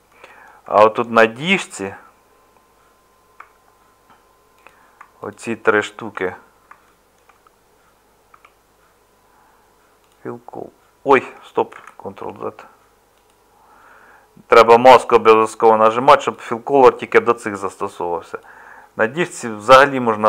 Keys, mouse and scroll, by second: 3.4 Tab, 8.3 Tab, 11.7 ctrl+z.